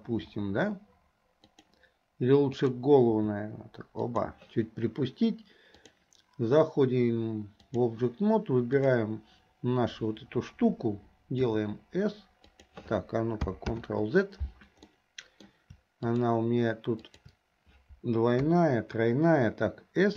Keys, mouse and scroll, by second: 0.3 r, 2.6 click, 3.2 r, 5.8-7.9 drag, 8.8 click, 13.0 s, 13.8 ctrl+z, 14.9 middle click, 16.2 shift+click, 17.2 shift+click, 18.4 KP_3.